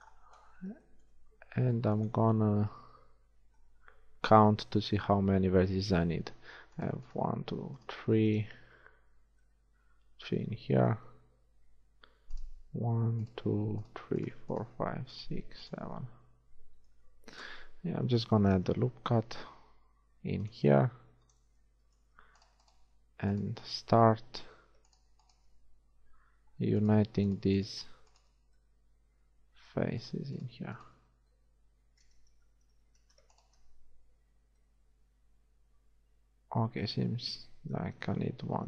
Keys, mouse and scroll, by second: 2.8 z, 3.4 z, 4.6 a, 9.7-12.4 middle drag, 12.4-17.6 right drag, 16.1-17.6 middle drag, 16.3-17.6 drag, 17.6 KP_1, 18.1 z, 19.5 ctrl+r, 22.2 z, 22.5-23.7 middle drag, 24.9 shift+middle click, 25.8-28.2 shift+middle drag, 26.4 shift+f, 28.6 f, 31.2 f, 32.8 ctrl+z, 34.4 f, 37.8 KP_1.